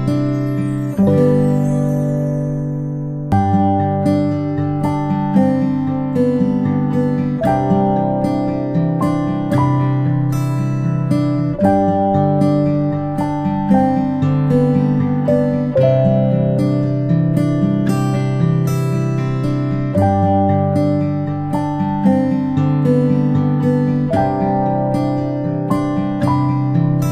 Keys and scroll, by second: 12.2 ctrl+space, 12.5 ctrl+space, 15.0 ctrl+z, 15.2 ctrl+z, 18.2 ctrl+z.